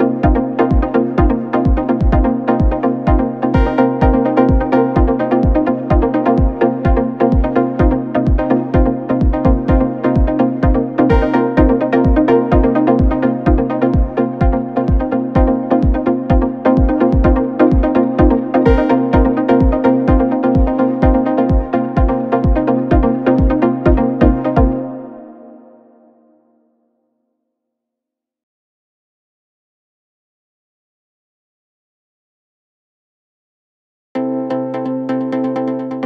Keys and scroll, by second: 13.5 p, 17.0 ctrl+d, 17.2 Escape, 23.2 2, 25.2 ], 25.4 Delete, 26.4 4, 32.0 3.